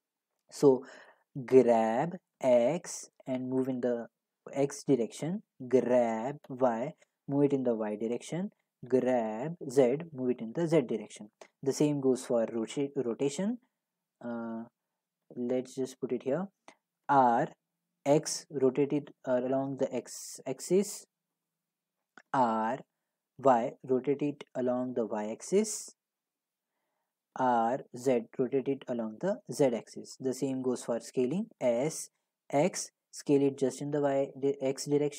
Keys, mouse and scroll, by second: 1.1 right click, 1.5 g, 2.4 x, 5.0 right click, 5.8 g, 6.5 y, 8.1 click, 8.9 g, 10.0 z, 11.1 right click, 15.2 g, 15.9 click, 17.0 r, 18.0 x, 21.4 click, 22.3 r, 23.4-26.6 drag, 23.4 y, 27.4 r, 27.9 z, 28.4-29.9 drag, 29.9-34.9 right drag, 31.6 s, 32.5 x.